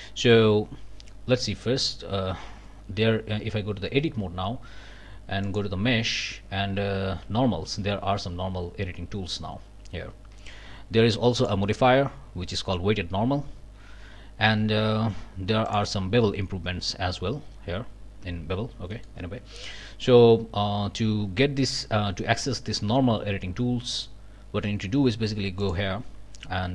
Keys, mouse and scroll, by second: 2.5 Tab, 5.4 scroll up 1, 10.3 Tab, 11.4 click, 15.7 click, 18.9 click, 19.5 shift+click, 22.6 Tab, 25.0 Tab, 25.6 click.